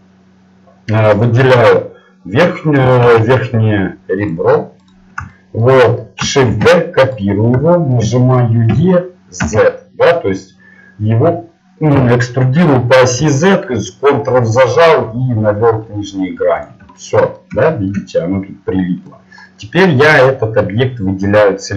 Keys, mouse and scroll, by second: 1.1-3.5 right drag, 3.5 click, 4.3 ctrl+Tab, 4.8-7.1 drag, 6.5 shift+d, 7.6 middle click, 8.7 e, 17.0-19.7 middle drag.